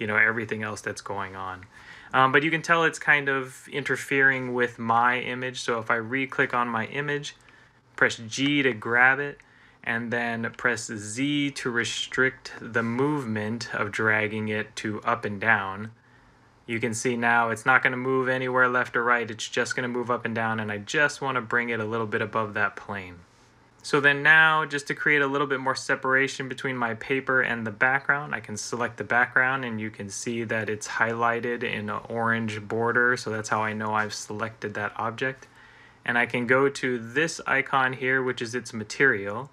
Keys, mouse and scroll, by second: 8.2 g, 11.6 z.